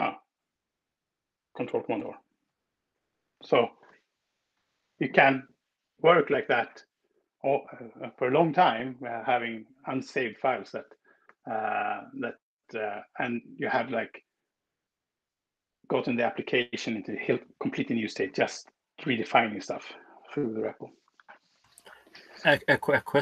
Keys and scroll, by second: 1.8 ctrl+super+r.